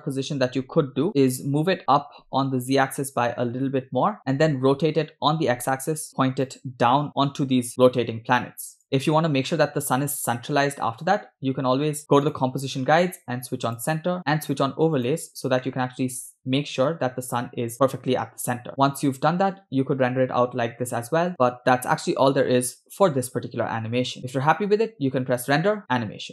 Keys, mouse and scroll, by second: 1.1 KP_0, 1.8 g, 4.7 r, 7.2 g, 8.8 scroll down 1, 9.4 scroll up 1, 12.0-12.7 scroll down 3, 12.2 click, 13.8 click, 15.1 click, 17.2 scroll up 2, 18.0 scroll down 2, 18.7 click, 18.7 scroll down 2, 18.8 space, 20.2 scroll down 1, 24.0 space, 25.4-26.3 drag.